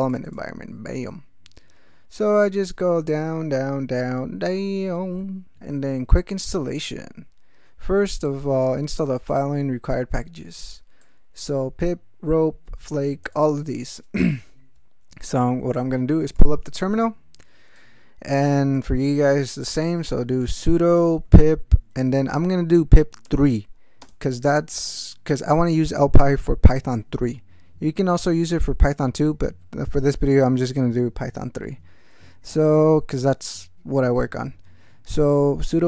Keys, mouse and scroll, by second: 1.1-5.2 scroll down 16, 6.3 click, 7.2 scroll down 2, 8.3-9.5 drag, 9.8 scroll down 2, 11.0-13.6 drag, 16.3 ctrl+alt+t, 17.8 click, 18.8 click, 19.9-21.9 typing, 23.2 3, 24.0 space.